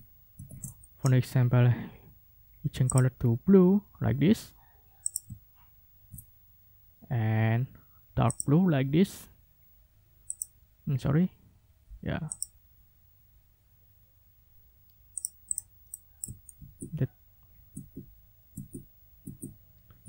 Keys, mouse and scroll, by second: 0.3 ctrl+shift+w, 2.9 click, 5.0 ctrl+click, 5.5 ctrl+scroll down 2, 8.3 click, 10.3 click, 12.3 click, 15.2 click, 15.5 click, 15.9 click, 16.5 ctrl+z, 17.7 ctrl+z, 18.5 ctrl+z.